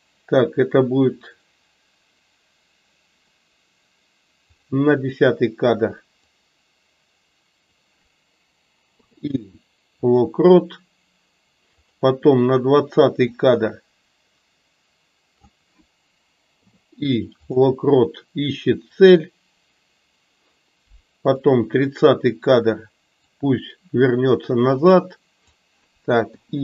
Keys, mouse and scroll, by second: 4.5 click, 6.4-7.6 drag, 13.3 click, 13.5-15.5 drag, 23.1 click, 23.4-25.5 drag.